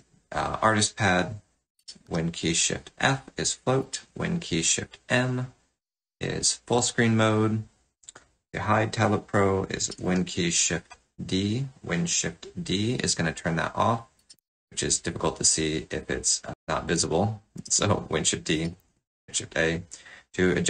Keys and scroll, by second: 2.0 shift+super+f, 9.9 shift+super+d, 14.3 shift+super+a, 17.5 shift+super+d, 18.7 shift+super+a.